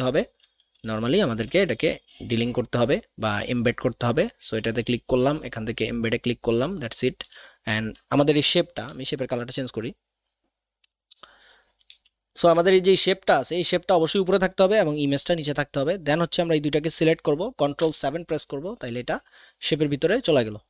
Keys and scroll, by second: 8.9 x, 12.0 x, 17.8 ctrl+shift+KP_7.